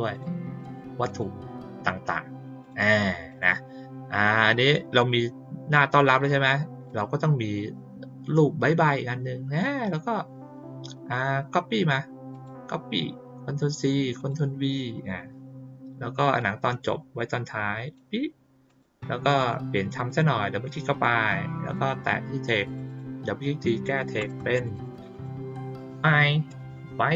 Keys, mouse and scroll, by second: 0.1 click, 0.6 click, 1.0 click, 2.6 click, 3.2 click, 4.9 click, 6.8 click, 12.3 click, 14.1 click, 16.3-17.9 drag, 18.6 click, 19.3 click, 19.9 click, 20.1 click, 21.7 click, 22.6 click, 22.8 click.